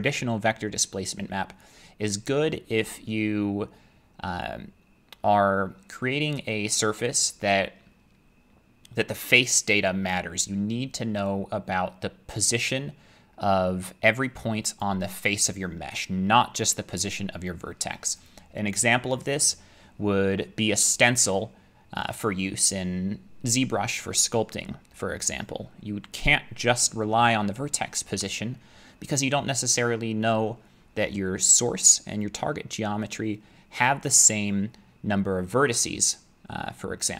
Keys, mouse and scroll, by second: 5.2-10.5 middle drag, 14.8 click, 23.2 middle click, 23.3 middle click, 24.5 middle click.